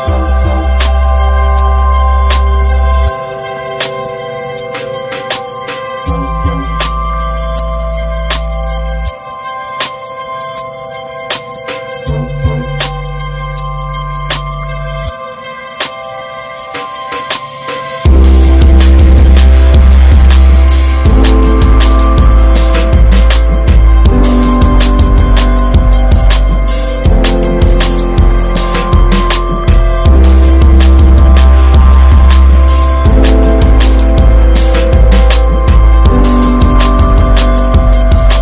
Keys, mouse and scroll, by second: 1.8 scroll down 2, 2.3 scroll up 1, 2.5 Tab, 2.9 Tab, 3.1 click, 3.9 s, 5.1 Tab, 5.5 alt+z, 5.8 scroll down 3, 6.1 ctrl+s, 6.2 drag, 6.5 middle drag, 6.8 ctrl+s, 7.0 drag, 7.2 alt+middle click, 7.4 alt+middle click, 7.7 Tab, 8.0 alt+z, 8.1 scroll up 1, 8.8 scroll down 2, 9.1 click, 9.3 ctrl+s, 9.5 click, 9.8 /, 10.1 click, 10.2 scroll down 1, 10.5 middle drag, 10.7 alt+z, 10.8 drag, 11.2 ctrl+s, 11.3 click, 11.9 alt+middle click, 13.1 shift+d, 15.6 shift+r, 16.0 drag, 16.3 middle drag, 16.6 alt+z, 16.9 alt+z, 17.1 click, 17.2 scroll down 2, 17.4 middle click, 18.2 scroll down 2, 18.4 middle drag, 18.6 click, 19.7 ctrl+j, 19.9 ctrl+a, 20.2 drag, 20.5 scroll up 2, 20.8 ctrl+z, 21.2 ctrl+z, 22.0 click, 22.4-23.3 middle drag, 23.3 click, 23.6 alt+middle click, 24.1 alt+z, 24.3 scroll down 3, 24.5 click, 25.0 scroll up 2, 25.8-26.9 drag, 27.0 drag, 27.4-27.8 middle drag, 27.8 alt+z, 27.9 click, 28.2-28.7 shift+middle drag, 28.7 ctrl+s, 28.9 click, 29.1 shift+a, 29.9 scroll down 3, 30.0 middle click, 30.2 s, 31.6 drag, 31.9 middle click, 32.0-32.9 scroll up 6, 32.2 shift+middle click, 32.5 middle drag, 33.0-33.6 shift+middle drag, 33.6 click, 33.8 Delete, 34.0 drag, 34.2-36.0 middle drag, 36.0 ctrl+s, 37.3 click, 37.6 middle click, 37.9 ctrl+s.